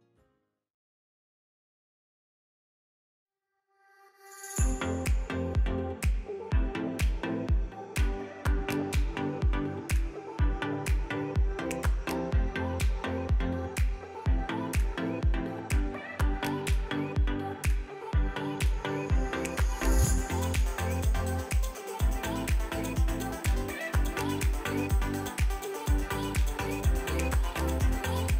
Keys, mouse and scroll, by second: 0.2 alt+click, 0.4 middle click, 0.9-1.2 scroll up 2, 1.2 shift+click, 1.3 shift+middle click, 1.5 shift+click, 1.7 middle click, 2.6 scroll down 1, 2.7 shift+middle click, 2.9 scroll up 4, 3.5 shift+click, 3.7 shift+click, 4.0 alt+shift+click, 4.5 alt+shift+click, 5.3 alt+shift+click, 5.7 right click, 5.9 click, 6.0 scroll down 4, 6.1-6.9 middle drag, 6.9 scroll down 1, 7.1-8.0 middle drag, 8.0 scroll down 1, 8.6 alt+h, 9.0 click, 9.2 a, 10.4-11.2 scroll up 10, 11.2 click, 14.6 l, 15.1 middle click, 15.6-16.3 scroll down 1, 16.3 click, 17.2 a, 17.3 a, 17.6 l, 21.8 click, 22.2 click, 23.0 click, 23.5 l, 24.2 g.